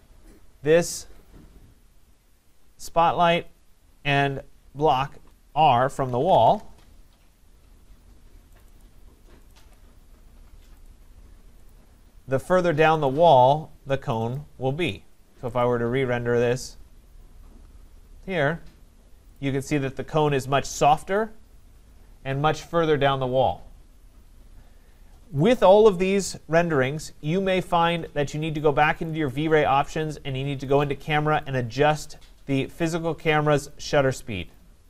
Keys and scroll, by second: 6.4 Return.